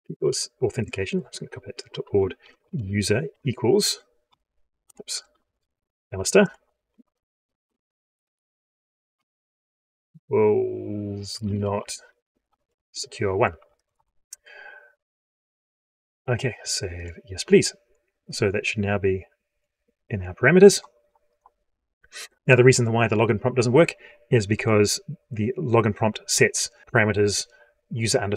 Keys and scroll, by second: 0.5 ctrl+c, 6.8 ctrl+v.